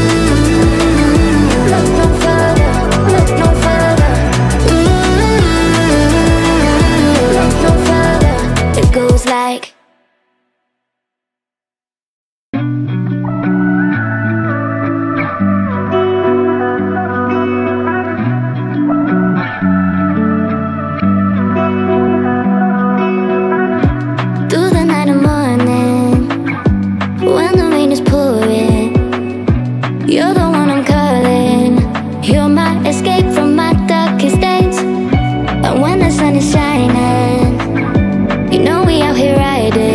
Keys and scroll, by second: 17.3-19.8 typing, 21.6 Return, 34.1 space.